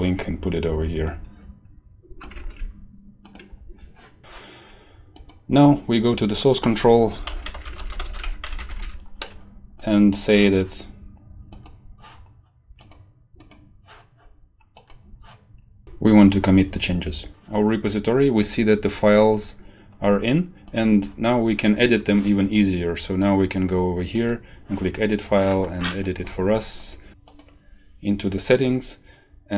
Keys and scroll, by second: 2.3 ctrl+v, 4.2 ctrl+s, 7.0-9.2 typing.